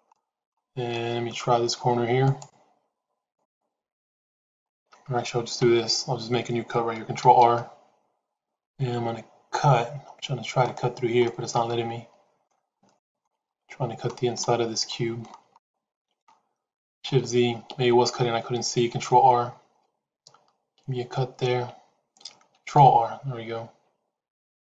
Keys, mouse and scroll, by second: 0.0 middle click, 0.8 middle click, 2.1 click, 3.2 click, 5.5 ctrl+e, 11.2-12.4 middle drag, 12.7 shift+middle click, 13.4 middle click, 14.2 shift+middle click, 15.5 shift+middle click, 17.8 shift+z, 22.5 ctrl+r.